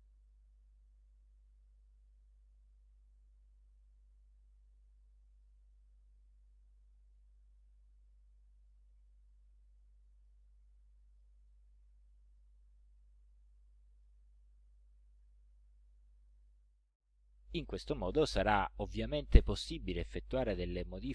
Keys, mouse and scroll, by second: 0.3 click, 1.5 ctrl+scroll up 2, 2.1 ctrl+scroll up 2, 3.6-5.6 ctrl+drag, 7.6-8.9 ctrl+drag, 9.3-10.5 drag, 11.2 click, 11.6-12.1 ctrl+scroll down 1, 12.4-12.8 ctrl+scroll up 1, 13.6 ctrl+click, 14.0 click, 15.7 ctrl+scroll down 2, 16.3 ctrl+scroll up 2.